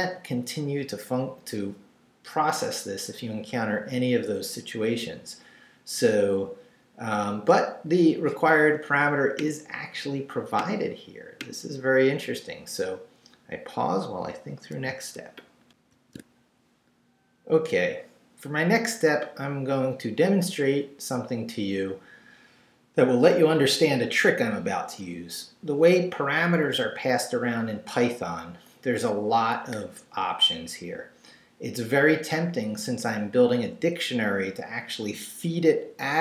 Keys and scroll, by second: 15.7 alt+shift+super+z.